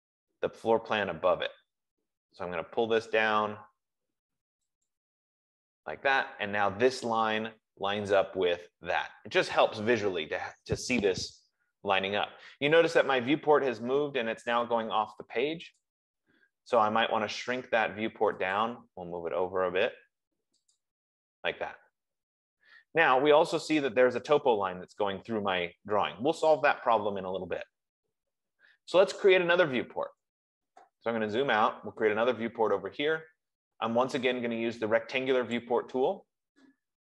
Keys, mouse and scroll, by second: 5.3-10.1 drag, 16.2 click, 18.8 click, 21.3 click, 30.6-31.1 scroll, 31.6-32.1 scroll, 36.0 click.